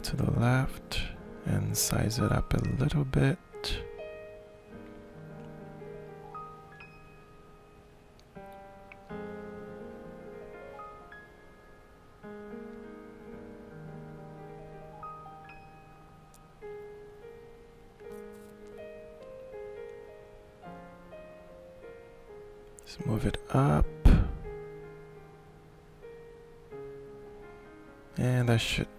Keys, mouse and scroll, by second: 0.2-5.8 shift+middle drag, 6.0-8.3 drag, 8.7 shift+click, 9.8 shift+middle click, 11.3-17.9 drag, 18.7-20.7 shift+middle drag, 21.3-22.7 drag, 23.0-24.9 shift+middle drag, 24.9-26.1 drag, 26.1-27.1 ctrl+middle drag, 27.8-28.9 drag.